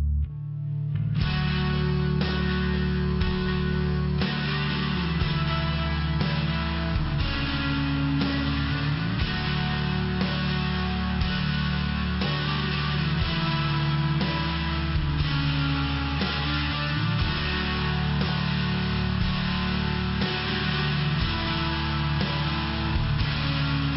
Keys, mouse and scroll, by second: 0.3 click, 0.9 click, 1.1 click, 1.6 click, 2.1 click, 2.7 click, 3.5 click, 4.5 click, 4.6 click, 5.0 click, 6.0 click, 6.7 click, 9.8 click, 11.2 click, 12.1 click, 12.3 click, 12.8 click, 12.9 click, 13.3 click, 13.9 click, 14.5 click, 15.0 click, 15.5 click, 16.2 click, 16.9 click, 19.0 click, 19.7 click, 20.3 click, 20.8 click, 21.3 click, 21.7 click, 22.3 click, 22.8 click, 23.3 click, 23.8 click.